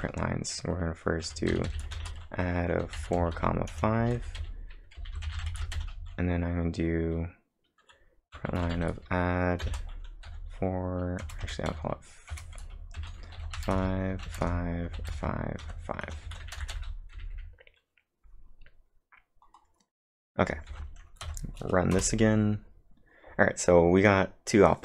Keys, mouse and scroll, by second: 0.0-0.2 typing, 1.9-6.3 typing, 9.6-10.8 typing, 13.0-17.7 typing, 18.5-19.1 scroll down 4, 19.6 scroll up 2, 20.0-20.5 scroll down 1, 20.7 ctrl+`, 21.3 Up, 22.0 Return.